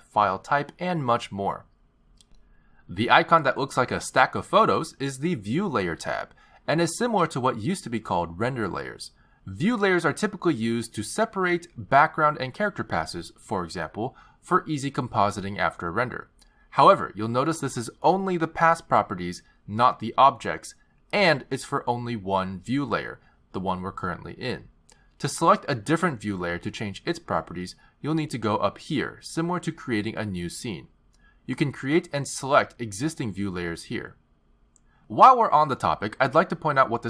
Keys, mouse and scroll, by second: 0.9-1.7 scroll up 1, 5.5 click, 11.3 click, 11.9 click, 19.3 click, 19.5 click, 20.5 click, 20.8 click, 29.5 click, 31.6 click, 33.5 click, 34.7 click.